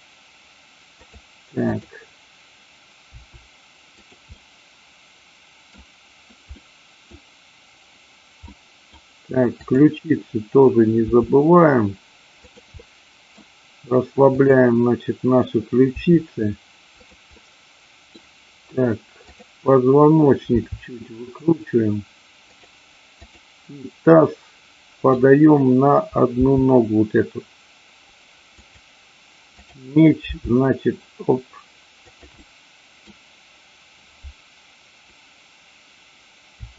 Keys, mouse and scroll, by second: 1.0 click, 1.7 click, 3.1 r, 4.0 click, 4.4-5.6 middle drag, 6.5 middle click, 8.5 middle click, 9.6-10.6 drag, 11.0 r, 12.5 click, 12.8 middle click, 14.4 click, 15.8 r, 17.0 click, 17.4 middle click, 20.5 r, 23.1 click, 24.2 middle click, 26.4 g, 28.5 click, 29.5 click, 30.4 g, 32.1 click, 32.4 middle click, 36.5 r.